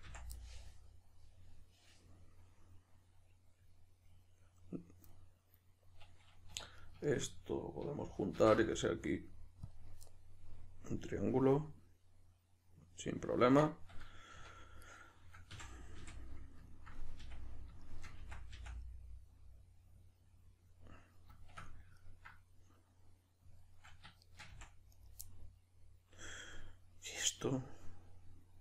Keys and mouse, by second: 0.1 f, 0.3-6.8 middle drag, 6.5 1, 6.8 right click, 7.1 shift+right click, 8.3 alt+m, 10.0-14.0 middle drag, 14.3 2, 14.8 right click, 15.5 f, 16.2-17.2 middle drag, 17.2 f, 17.8-18.2 shift+middle drag, 18.2 f, 18.8-24.3 middle drag, 24.3 shift+right click, 24.5 f, 24.9 right drag, 25.3-28.6 middle drag.